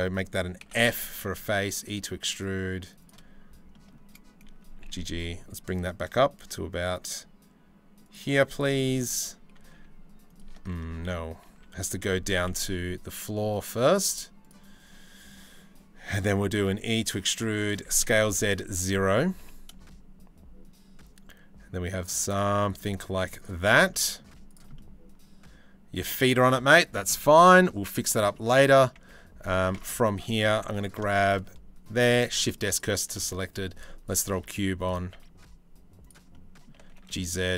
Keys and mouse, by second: 0.3 f, 0.8 e, 4.3 g, 7.8 z, 9.4 e, 10.2 ctrl+z, 10.5 ctrl+z, 11.1 ctrl+z, 12.1 e, 16.2 e, 17.5 s, 19.0 g, 22.6 z, 23.0 click, 23.9 z, 26.1-28.4 middle drag, 28.7 Tab, 29.4 Tab, 30.3 3, 30.3 click, 30.7 shift+click, 31.8 shift+s, 32.8 shift+a, 34.0 s, 34.7 s, 35.9 click, 36.4 g.